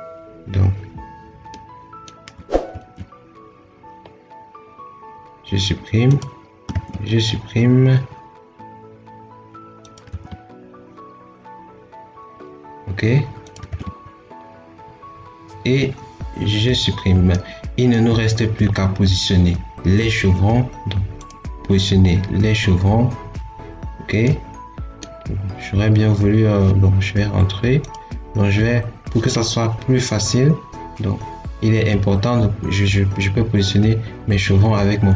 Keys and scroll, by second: 2.5 ctrl+x, 6.5 ctrl+x, 10.0 ctrl+x, 13.5 ctrl+x.